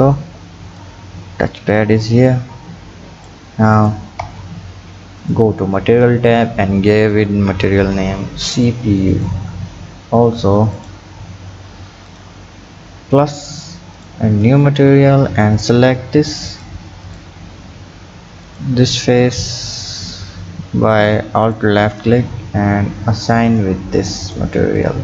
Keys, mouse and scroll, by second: 3.8 click, 4.2 Tab, 5.2 click, 6.3-9.2 drag, 10.8 click, 12.1-12.6 drag, 13.9 click, 15.6 alt+click, 16.5 alt+click, 17.1 alt+click, 18.5 click, 21.4 alt+click, 23.4 drag, 24.3 drag, 24.8 click.